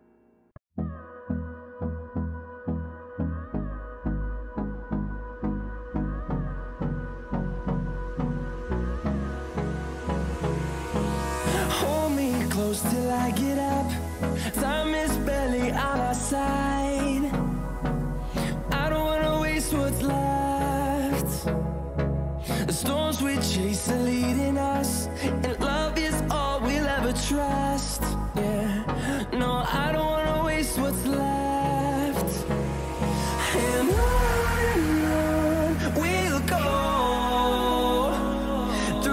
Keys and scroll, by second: 22.7 b, 31.0 ], 31.7 ], 32.0 ], 33.9 ], 34.7 ], 35.2 ], 35.7 =.